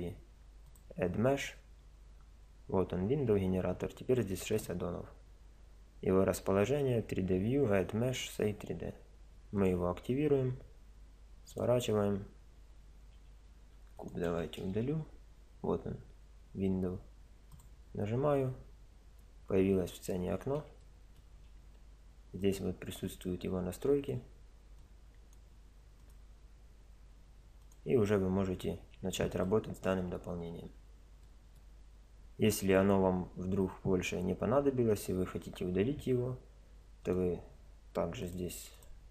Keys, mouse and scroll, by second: 13.6 x, 14.5 shift+a, 18.4-23.1 middle drag, 23.1 click, 23.8 middle click, 24.9 click, 25.2 middle click, 25.2-29.3 drag, 29.4-30.8 middle drag, 31.3-35.0 middle drag, 37.0-39.0 drag.